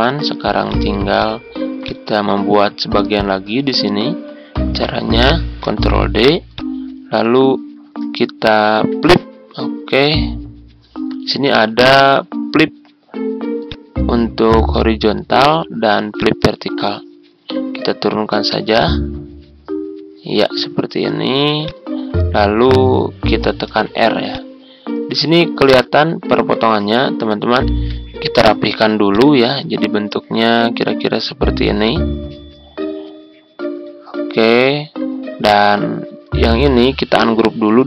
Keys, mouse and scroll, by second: 5.6 ctrl+d, 6.5-17.1 drag, 21.6 shift+click, 23.7 r, 24.2 click, 27.6 Tab, 27.9 Tab, 29.0-34.8 drag, 35.2 ctrl+scroll up 1, 36.1-37.8 ctrl+scroll down 1.